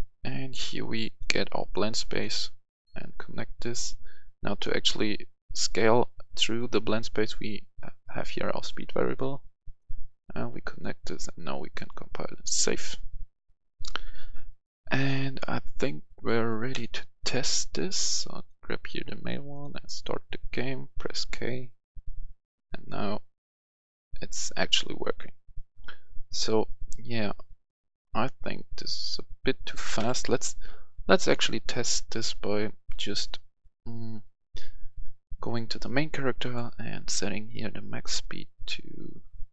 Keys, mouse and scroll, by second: 20.9-22.6 typing, 23.8-24.3 typing, 25.8 typing, 27.8 typing, 29.9 Escape, 31.2 click, 32.8 click.